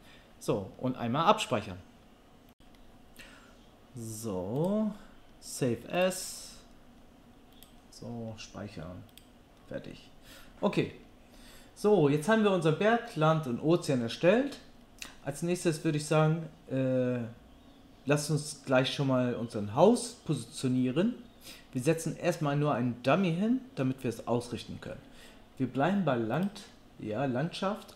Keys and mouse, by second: 2.5-4.6 middle drag, 4.6-26.4 drag, 26.4-27.9 middle drag.